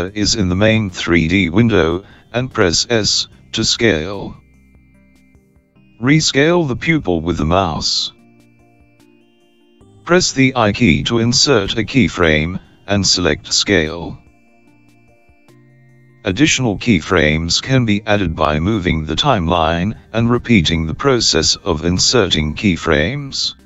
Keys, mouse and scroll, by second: 4.3 s, 10.3 i, 21.9 click.